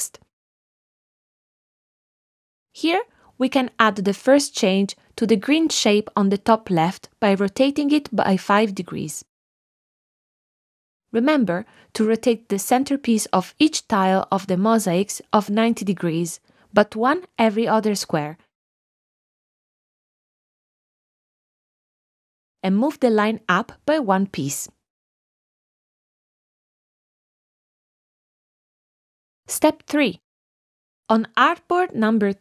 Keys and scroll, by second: 0.8 shift+Down, 9.7 5, 10.0 Return.